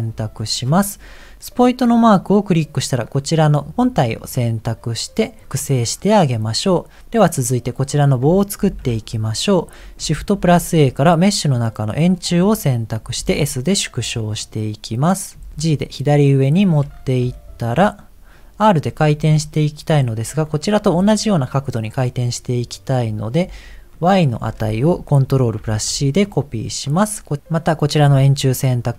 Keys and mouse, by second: 2.1 click, 5.9 middle click, 9.0 KP_1, 10.3 shift+a, 13.2 s, 15.3 s, 15.5 g, 17.3 shift+middle click, 23.9-26.4 drag, 26.9 click.